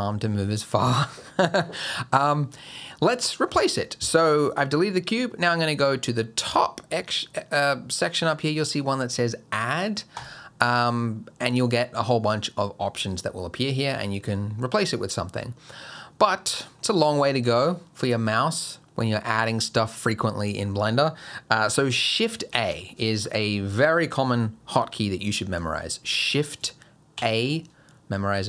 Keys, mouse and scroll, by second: 10.2 click, 22.5 shift+a, 27.2 shift+a.